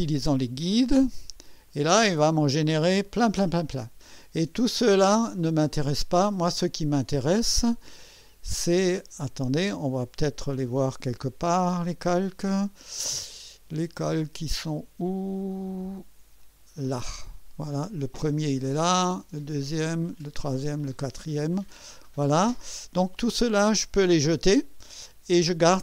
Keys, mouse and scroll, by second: 1.7 click, 12.1 click, 16.4 click, 19.0 click, 20.2 click, 21.0 click, 22.5 Escape.